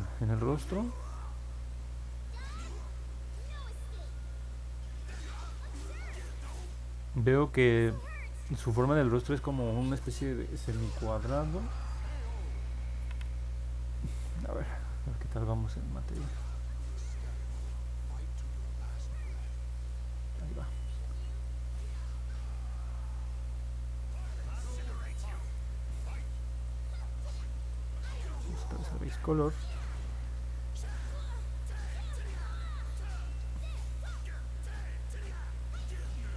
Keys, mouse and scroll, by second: 16.2 click, 18.0 click, 19.7 middle click, 19.7 scroll down 1, 20.1 middle click, 21.4-25.1 alt+drag, 26.5 click, 27.6 click, 28.4 middle click, 29.2 alt+click, 30.2 middle click, 31.2 alt+middle click, 32.5 alt+click.